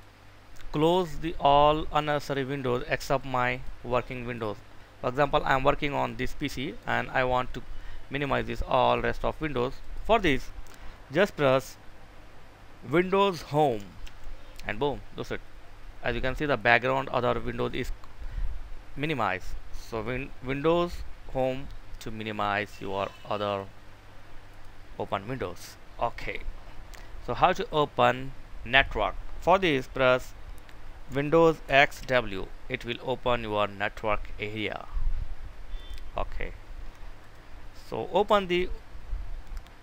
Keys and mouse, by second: 13.8 Home, 23.1 click, 31.6 super+x, 35.9 click.